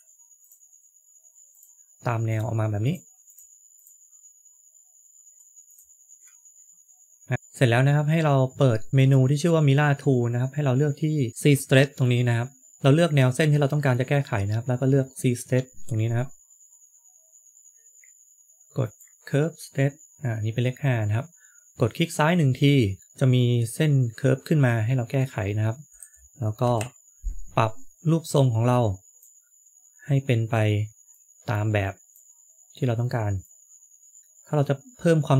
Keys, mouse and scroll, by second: 0.3 ctrl+click, 1.4 ctrl+click, 7.3 click, 12.7 shift+middle click, 12.7 scroll down 1, 18.8 click, 25.9 KP_3, 26.5 KP_3, 28.9 KP_1.